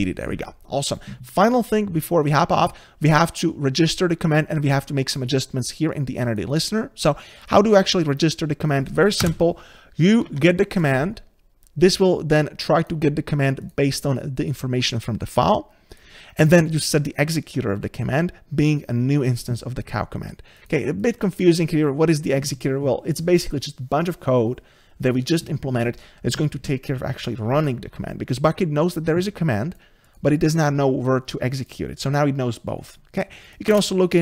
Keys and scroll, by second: 0.1 Delete, 10.3 Tab, 33.8 ctrl+space.